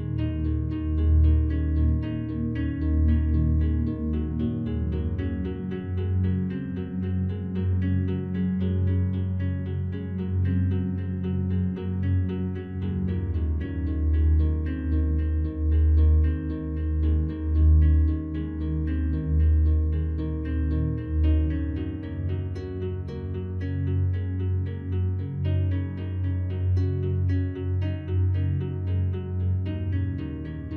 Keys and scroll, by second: 10.5 ctrl+alt+z, 20.9 ctrl+z, 28.8 ctrl+g.